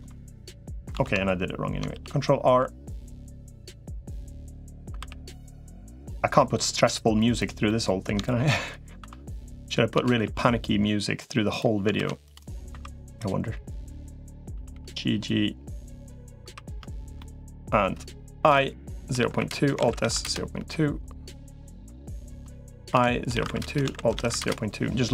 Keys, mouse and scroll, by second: 0.8 ctrl+z, 1.8 ctrl+r, 7.5 middle click, 8.0 shift+middle click, 8.8 2, 9.8 g, 11.8 ctrl+r, 12.6 2, 13.8 click, 14.4 g, 16.4 3, 17.0 middle click, 18.2 i, 19.6 alt+s, 21.4 click, 21.8 click, 22.8 i, 23.6 alt+s.